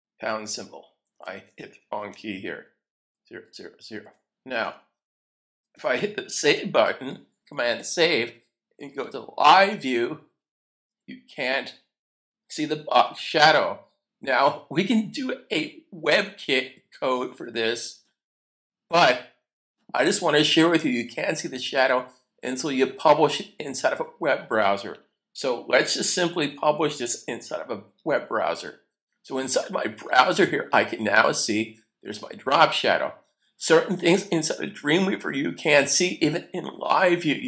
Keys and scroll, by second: 0.1 0, 1.7-4.1 typing, 4.6 Return, 6.4 super+s, 26.4 super+F12.